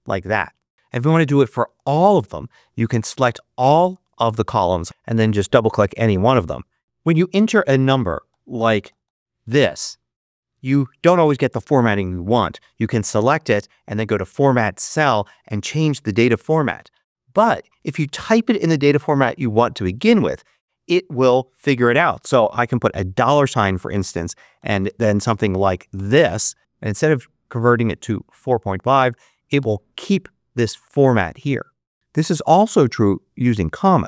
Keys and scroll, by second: 17.2 super+z, 23.0 shift+4, 24.4 4, 24.8 5, 25.8 0, 29.4 Return, 33.7-34.0 typing.